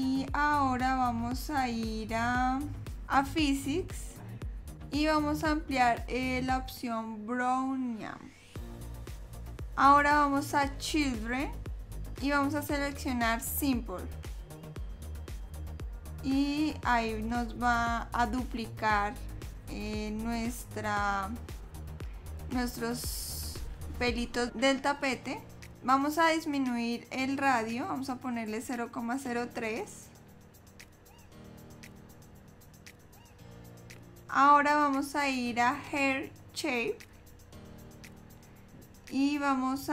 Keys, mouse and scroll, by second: 3.9 click, 9.4 middle click, 9.6-10.7 scroll down 2, 10.7 click, 11.5-12.2 scroll down 2, 12.3 scroll down 2, 13.6 click, 25.9 click, 34.2-35.0 scroll down 8, 35.5-35.9 scroll down 3, 37.7 click, 38.8-39.9 scroll down 4.